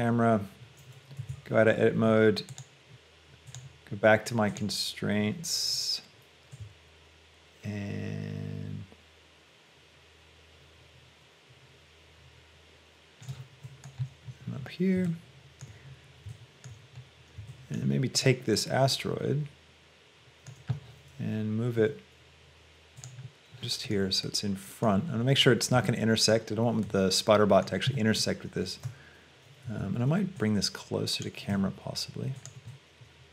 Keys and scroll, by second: 1.3 Tab, 21.8 g, 29.9 Escape, 31.7 g.